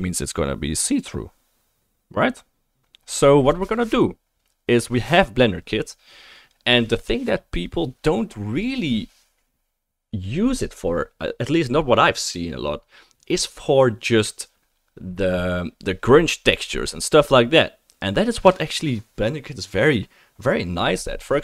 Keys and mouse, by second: 6.6-7.4 drag.